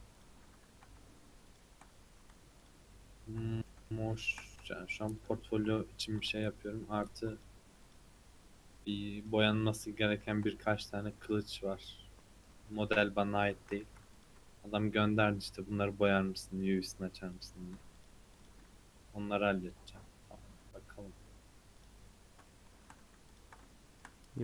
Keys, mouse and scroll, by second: 0.2 click, 1.4 shift+click, 2.6 ctrl+click, 3.4-5.1 middle drag, 5.1 ctrl+click, 7.0 shift+click, 7.3 shift+click, 7.8 shift+click, 9.2 shift+click, 9.7 shift+click, 10.2 shift+click, 11.0 scroll down 5, 11.4 middle click, 12.2 middle click, 12.7-13.8 scroll up 6, 13.8 2, 14.1 alt+click, 15.4 alt+click, 15.8 scroll down 2, 16.2 scroll up 2, 16.6 middle click, 17.3 click, 17.9 alt+click, 18.3 alt+click, 19.3-20.1 scroll down 6, 20.1-21.4 scroll up 4, 21.4-21.7 scroll up 1, 21.7 click, 22.4 shift+middle click, 23.2 ctrl+click, 23.7 shift+middle click.